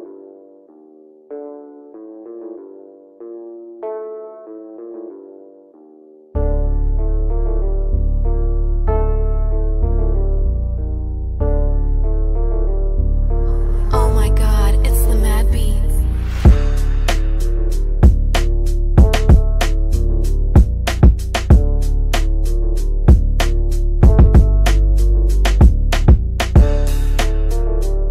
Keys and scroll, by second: 2.1 F9, 9.4 F3, 9.8 Escape, 13.2 d, 16.4 f.